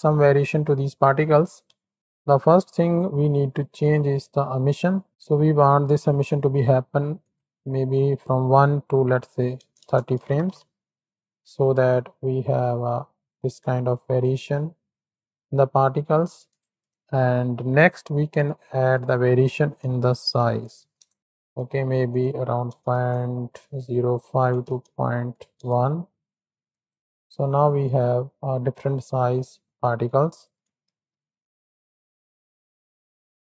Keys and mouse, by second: 1.7 Tab, 1.9 click, 3.8 click, 7.1-9.8 drag, 10.4 shift+Right, 10.5 shift+Left, 11.8 space, 13.2 drag, 13.4 middle click, 15.9 space, 16.4 click, 16.8 click, 18.4-21.5 drag, 22.0-25.6 drag, 26.6 click, 27.0 shift+Left, 27.0 click, 27.0 space, 30.1-33.5 drag, 31.0 shift+Left.